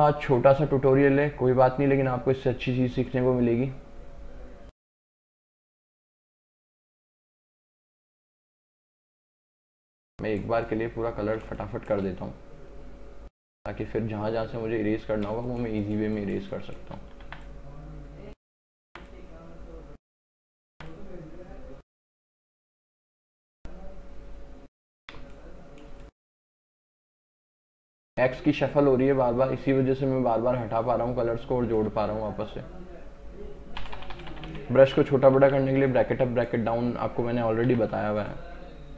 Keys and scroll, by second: 6.7 space, 9.9 space, 15.4 space, 17.3 x, 20.8 x, 25.2 space, 26.8 x, 32.0 x, 33.9 [, 37.8 x.